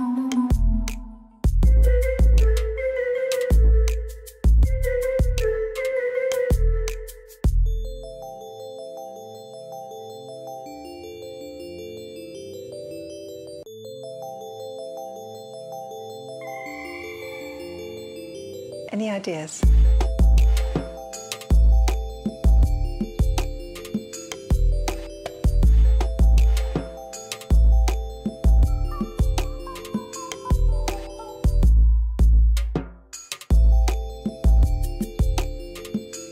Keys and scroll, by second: 0.3 shift+z, 1.2 ctrl+r, 2.9 Return, 5.1 Tab, 5.7 g, 6.0 z, 7.6 Escape, 9.4 Tab, 11.1 3, 14.2 x, 16.4 shift+z, 19.8 2, 21.2 ctrl+r, 22.8 3, 23.0 0, 23.6 Return, 25.3 ctrl+r, 26.1 1, 26.3 5, 26.6 Return, 35.3 Tab.